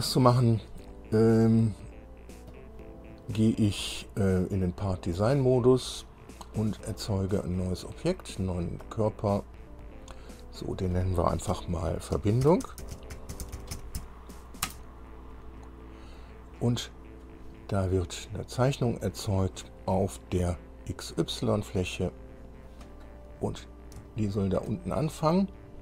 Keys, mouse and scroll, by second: 2.7 click, 5.0 click, 6.0 click, 7.0 click, 9.0 click, 10.2-10.6 scroll down 2, 10.8 click, 11.7 F2, 12.6-14.2 typing, 14.8 Return, 19.2 click, 21.1 click, 22.2 click, 23.5-23.9 scroll up 1, 24.2 shift+scroll up 1, 24.3 shift+click, 25.4-25.8 scroll up 2.